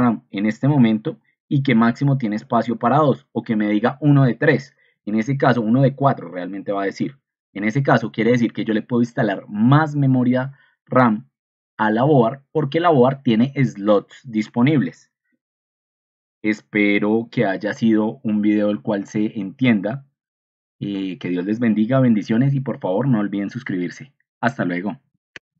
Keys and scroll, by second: 16.4 ctrl+alt+1, 18.5 ctrl+2, 25.4 ctrl+End.